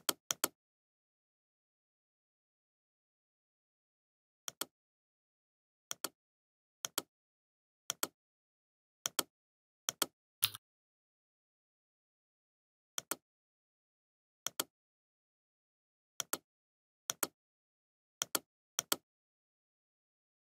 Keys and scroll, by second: 0.7 Return, 8.7 ctrl+d, 11.5 ctrl+d, 13.2 ctrl+f, 13.6 ctrl+z, 13.9 ctrl+g, 14.5 ctrl+g, 15.7 Up, 16.2 Down, 16.4 Left, 17.0 Up, 17.3 Left, 17.5 Up, 19.9 Up.